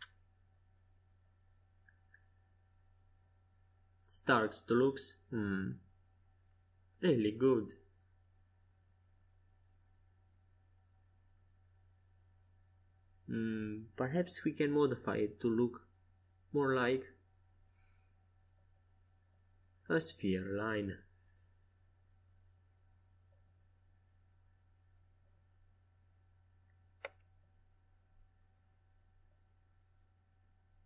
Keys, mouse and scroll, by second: 0.8 a, 1.5 c, 3.7-7.0 drag, 9.5 a, 17.9 c, 19.6-22.7 drag, 22.7 a, 23.5 c, 25.2-27.8 drag, 28.4 a, 28.9 c, 30.4-30.8 drag.